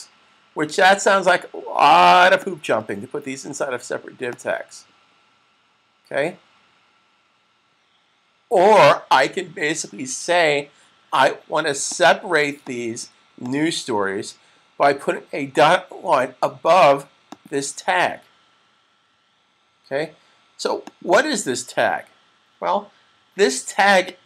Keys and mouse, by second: 2.2 click, 11.7 click, 17.1 click, 20.7 click, 23.9 click.